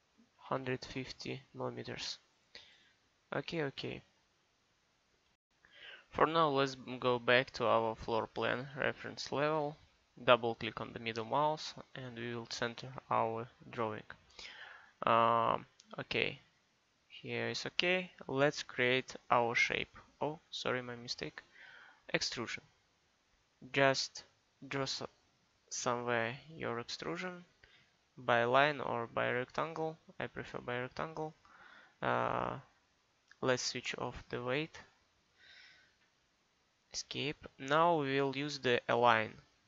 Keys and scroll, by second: 0.4 1, 0.6 5, 0.9 0, 35.9 Escape.